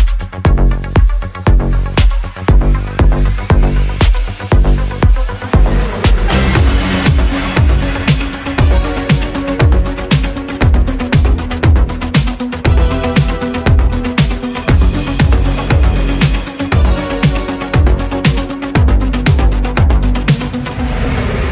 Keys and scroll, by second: 4.7 ctrl+z.